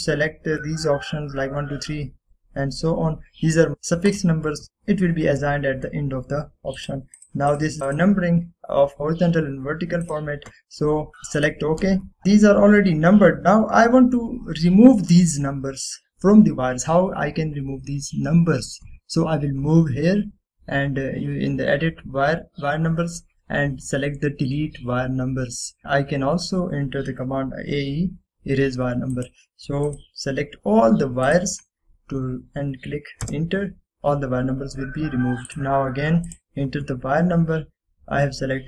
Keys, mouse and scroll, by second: 4.3 click, 4.3 typing, 7.8 click, 11.1 click, 13.8 scroll down 1, 14.3 scroll up 1, 30.3 click, 34.3 Return, 36.6 click, 37.4 typing.